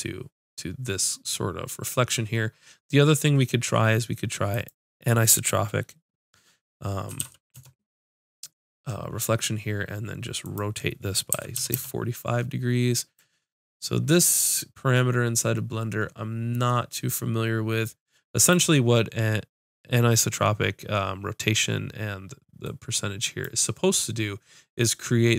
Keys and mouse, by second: 4.5-7.4 drag, 10.4-14.9 drag, 16.5 middle click, 23.2-25.0 drag, 25.0 middle click.